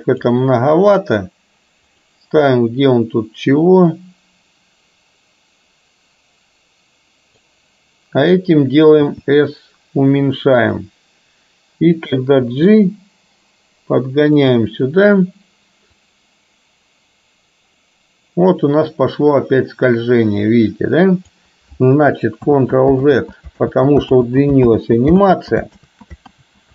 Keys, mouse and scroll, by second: 2.1 click, 2.6-7.6 drag, 9.0 s, 12.8 g, 16.2-21.5 drag, 22.6 ctrl+z, 23.1 ctrl+z, 23.7 ctrl+z, 24.2 ctrl+z, 24.7 ctrl+z, 25.3 ctrl+z, 26.0 ctrl+z, 26.5 ctrl+z.